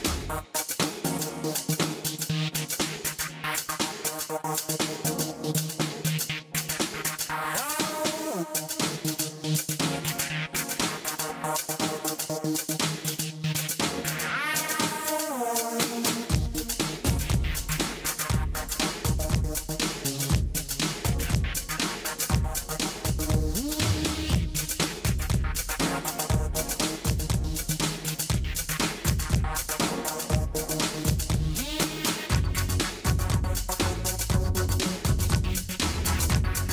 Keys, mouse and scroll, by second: 1.1-2.2 middle drag, 2.2 Tab, 2.4 Tab, 4.7 s, 5.8 s, 8.3 s, 11.6 s, 13.1 s, 15.9 Tab, 16.6-17.1 middle drag, 17.6 alt+h, 19.0 Tab, 20.2 a, 21.1 click, 21.2-21.7 drag, 21.8 s, 23.9 click, 24.2-25.7 drag, 24.8 s, 28.8-30.7 drag, 30.7 s, 32.8 middle click, 33.3 middle click, 33.5 middle click, 34.2 middle click, 34.7 middle click, 35.3 KP_1, 36.4 s.